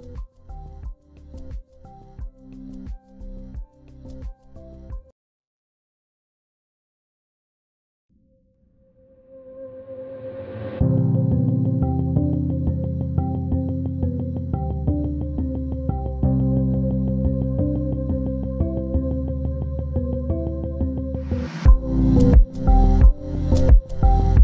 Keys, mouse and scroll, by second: 2.4 double click, 6.0 Return, 7.0 ctrl+e, 7.7 ctrl+space, 8.0 ctrl+click, 10.3 double click, 20.8 ctrl+z, 21.4 double click, 22.8 scroll down 1, 23.6 z.